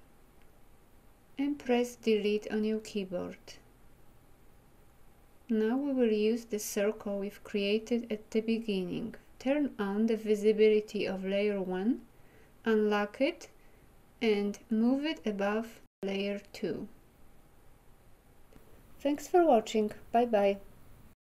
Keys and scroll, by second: 1.6 Delete.